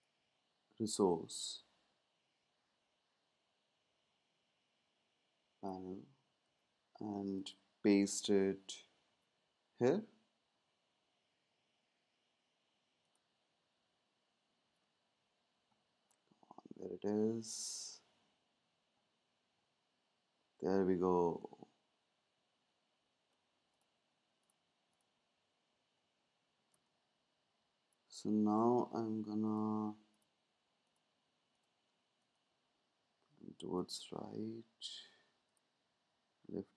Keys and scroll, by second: 6.4 super+c, 14.6 super+v, 26.7 space.